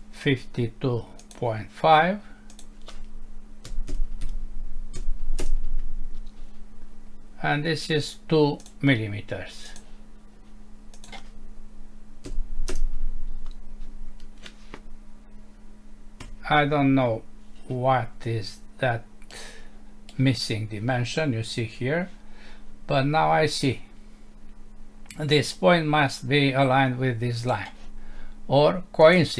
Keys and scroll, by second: 5.4 Return, 12.7 Return, 16.2 Escape.